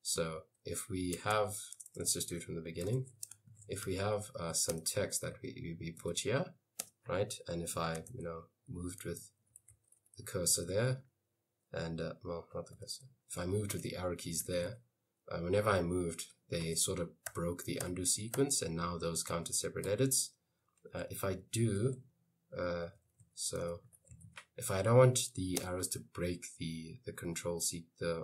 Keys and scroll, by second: 0.2 shift+a, 1.4-2.4 typing, 3.0 Escape, 3.5-6.7 typing, 8.1 Left, 8.2 Right, 9.4-11.2 typing, 12.8 Left, 13.0 Right, 13.8-15.4 typing, 16.9 Escape, 17.3 u, 17.9 u, 18.4 u, 19.9 i, 22.7-25.7 typing.